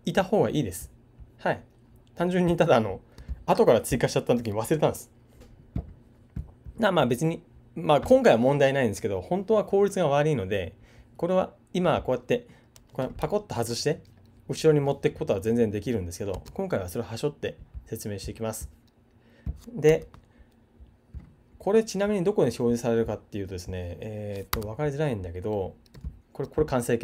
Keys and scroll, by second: 16.3 super+z.